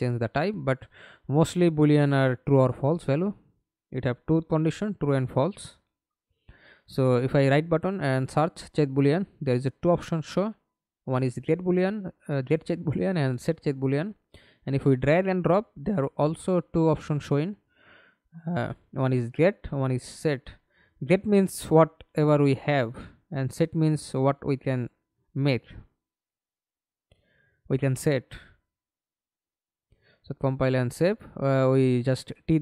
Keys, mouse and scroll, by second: 1.0 right click, 3.8-7.0 typing, 18.5-19.3 scroll up 4, 19.3 scroll up 1, 25.5 double click.